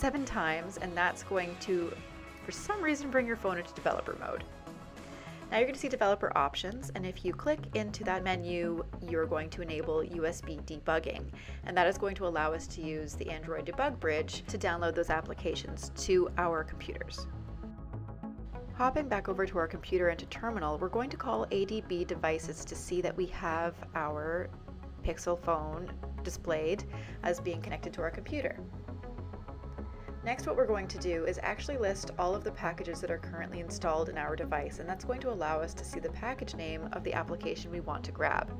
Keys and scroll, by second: 18.8-20.3 typing, 29.7-32.8 typing, 34.8-36.8 typing.